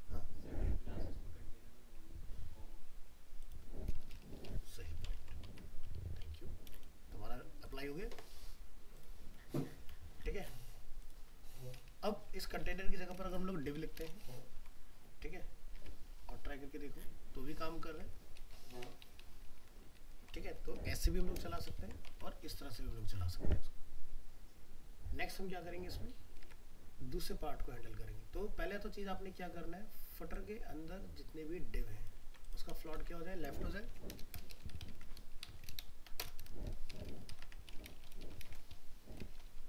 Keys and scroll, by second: 5.2 ctrl+s, 5.5 alt+Tab, 12.6 ctrl+shift+Left, 14.5 ctrl+s, 15.7 alt+Tab, 18.8 ctrl+Left, 21.8 ctrl+s, 22.1 alt+Tab, 26.4 alt+Tab, 32.2 ctrl+c, 32.9 ctrl+v.